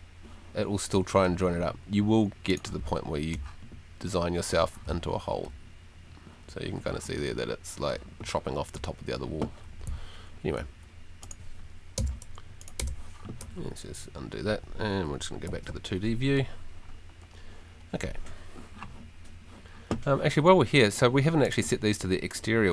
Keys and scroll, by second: 2.8 d, 3.3 w, 4.8 s, 5.4 w, 6.8 s, 10.0 Escape, 12.0 BackSpace, 15.5 F2, 22.2 Escape.